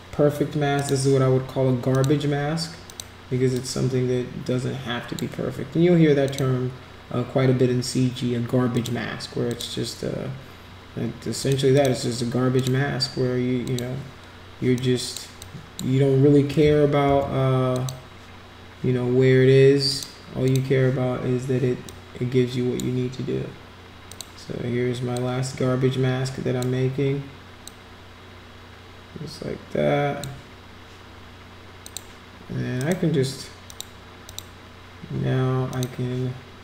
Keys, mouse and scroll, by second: 0.7 click, 1.9 click, 2.9 click, 3.5-5.2 drag, 6.2 click, 8.7 click, 9.5 click, 11.4 click, 11.7 click, 12.6 click, 13.6 click, 14.8 click, 15.4 click, 16.6 ctrl+z, 17.1 ctrl+z, 17.7 click, 19.9 click, 20.4 click, 21.8 click, 24.1 click, 25.1-26.6 drag, 27.7-30.2 drag, 31.8 click, 32.8 right click, 33.7 click, 34.3 click, 35.7 click.